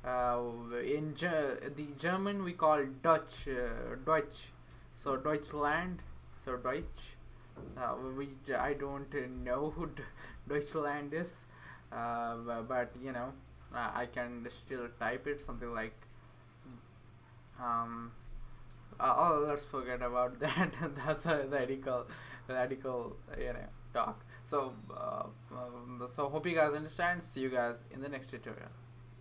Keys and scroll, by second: 0.0-0.4 typing, 3.1-4.1 typing, 6.0 Return, 10.3 Left, 15.4 typing, 19.3 BackSpace.